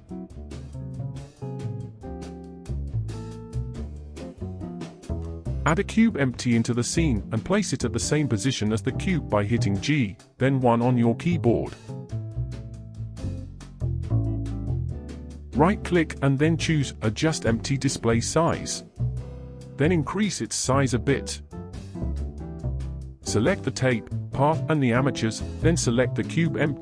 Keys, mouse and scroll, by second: 0.2-0.7 scroll down 2, 0.3 middle drag, 0.7 shift+middle click, 0.9-1.9 scroll up 18, 1.4 shift+middle click, 1.9-2.3 middle drag, 2.3-2.8 scroll down 7, 2.6 shift+middle click, 2.8-3.2 scroll up 7, 3.2-5.1 shift+middle drag, 5.1 shift+a, 10.0 g, 14.8-15.3 scroll up 4, 15.3-15.6 scroll up 1, 15.6-21.9 right drag, 21.9 click, 24.7 click, 25.6 shift+click.